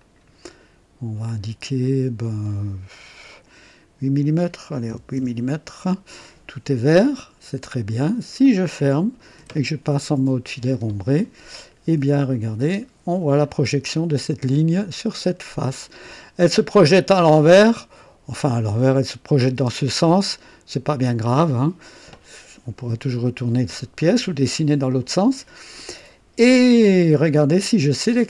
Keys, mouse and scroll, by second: 0.0-1.0 typing, 1.2 click, 4.9 typing, 5.1 KP_Enter, 7.8 click, 9.4 1, 10.7 click, 12.3 click, 12.6 space, 13.4-16.1 drag, 16.1-16.4 typing, 17.2-19.6 drag, 19.5 typing, 20.9-21.7 drag, 23.1-24.3 drag.